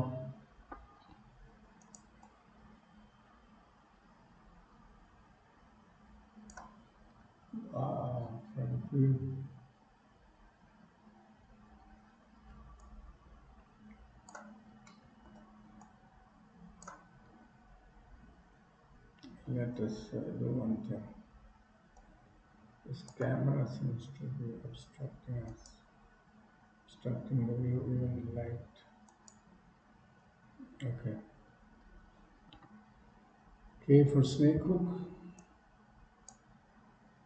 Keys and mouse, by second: 2.4-6.7 drag, 7.4 KP_1, 12.9-14.4 shift+drag, 15.0 shift+middle click, 16.0 shift+click, 22.0-23.3 drag, 29.1 click, 35.4 click.